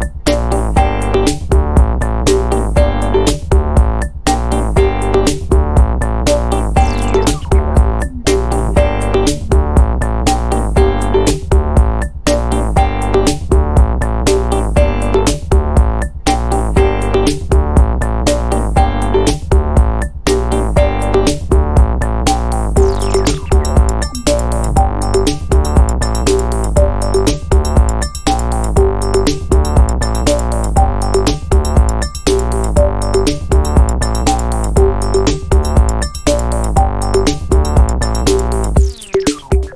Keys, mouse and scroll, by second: 0.9-2.6 drag, 3.4-5.9 drag, 6.0 click, 6.4 click, 7.4 click, 7.8 click, 8.2-12.0 drag, 12.2 scroll down 1, 12.6 scroll up 2, 13.4 scroll down 1, 13.9 scroll up 1, 15.9 click, 18.0 ctrl+click, 19.8 ctrl+click, 21.2 click, 23.0 click, 24.0 ctrl+click, 25.6 click, 26.9-33.6 drag, 34.4 click, 35.7 click, 37.5 click, 38.3-39.7 drag.